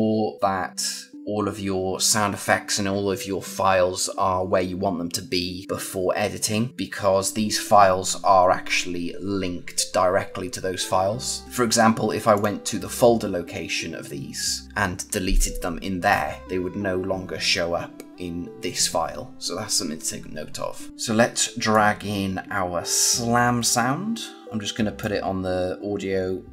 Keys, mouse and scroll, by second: 11.4 click, 12.2 click, 21.6 click.